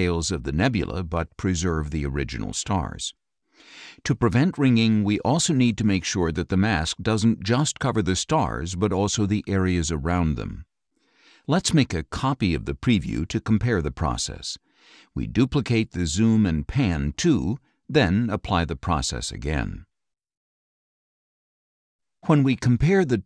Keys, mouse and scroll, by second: 2.5 click, 3.4-4.5 drag, 5.0 scroll up 1, 5.0 click, 6.6 click, 7.9 click, 8.8 click, 9.7 click, 10.6 click, 13.4-15.0 drag, 15.7-16.9 drag, 19.0 click.